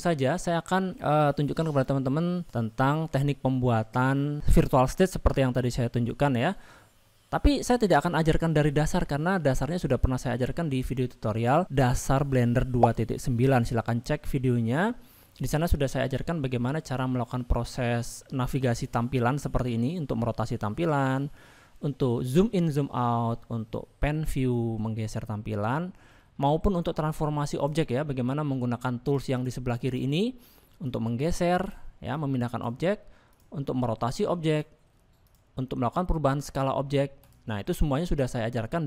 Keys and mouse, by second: 7.1 middle click, 7.9-8.5 middle drag, 8.7 shift+middle click, 9.2 middle click, 17.1 shift+middle click, 18.9-20.2 middle drag, 20.5-21.5 middle drag, 23.8-25.8 shift+middle drag, 27.6 click, 29.0 click, 29.4 click, 30.9 click, 32.2 click, 34.1-34.6 drag, 35.3 click, 38.2 click.